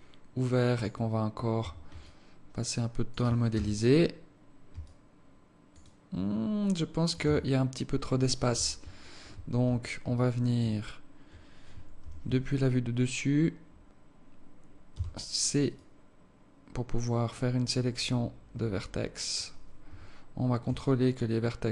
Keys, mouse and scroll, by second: 0.7 click, 1.1 scroll down 2, 1.6 Tab, 2.0 alt+click, 3.5 KP_0, 4.8 alt+click, 5.9 alt+click, 7.3 Tab, 8.5 KP_7, 9.2 scroll up 1, 10.1 alt+shift+click, 10.8-11.1 scroll down 2, 12.0 z, 12.4 scroll up 2, 12.7 scroll down 1, 14.9 c, 20.8 alt+click.